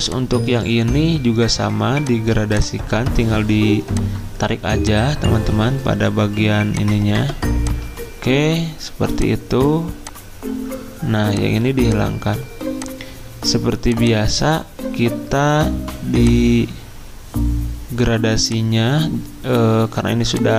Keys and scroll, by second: 0.4 ctrl+z.